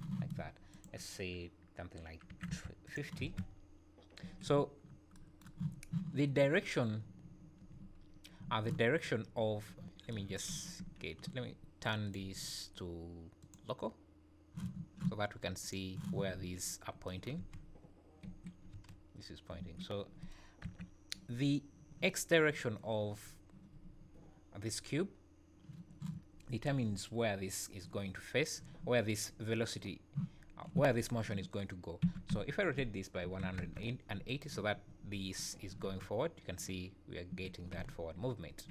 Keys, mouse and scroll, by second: 0.7 click, 3.2 space, 4.2 Escape, 4.8 scroll up 2, 5.7 scroll up 2, 7.3 `, 8.0 scroll up 2, 8.4 `, 9.3 `, 12.0 click, 15.6 click, 16.3 `, 17.3 space, 18.2 Escape, 18.7 space, 19.6 Escape, 20.6 KP_1, 32.0 r, 35.5-35.9 scroll down 4, 35.9 space, 37.3 Escape, 37.8 z.